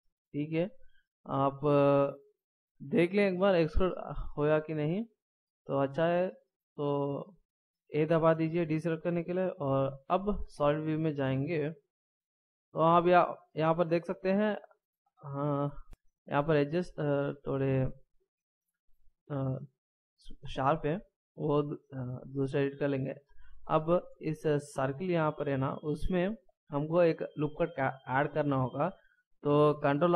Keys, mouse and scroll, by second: 1.8 middle click, 8.0 a, 10.9 z, 12.8 scroll up 2, 14.5 middle click, 20.8 middle click.